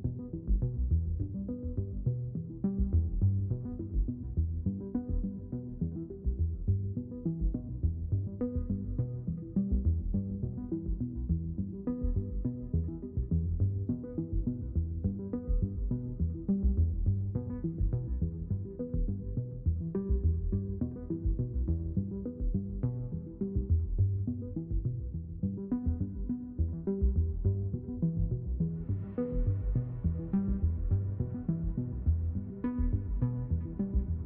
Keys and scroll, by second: 3.0-4.7 typing.